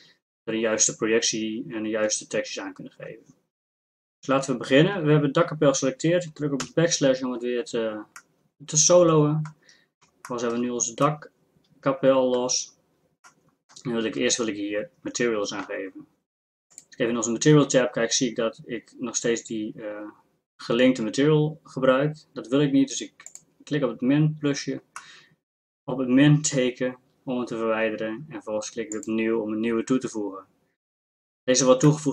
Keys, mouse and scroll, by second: 6.6 KP_Divide, 16.7-23.3 drag, 25.1 middle click, 31.0-32.1 middle drag.